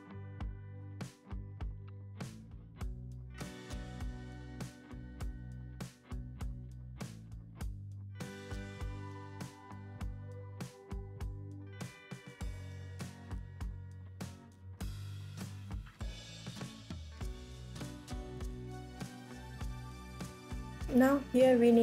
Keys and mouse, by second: 1.0 r, 2.3 g, 3.2 click, 3.7 KP_1, 7.4 shift+d, 8.7-10.1 drag, 10.8-11.9 drag, 12.2 shift+d, 13.3 click, 16.1 r, 17.5 ctrl+s, 18.1 click, 18.2 middle click, 18.3 click, 18.4 middle click, 19.9 shift+click, 20.9 ctrl+s, 21.3 shift+Tab, 21.5 shift+a.